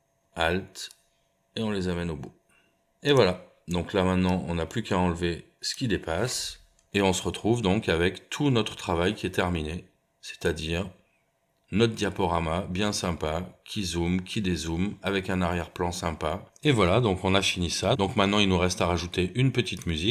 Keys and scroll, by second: 6.7 BackSpace, 6.9 space.